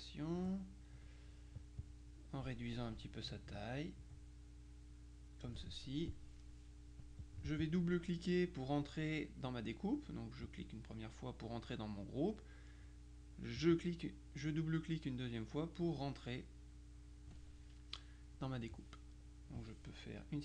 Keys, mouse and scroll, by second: 1.9 click, 3.4 ctrl+click, 7.3-8.3 drag, 10.5 click, 12.9 click, 13.7 click.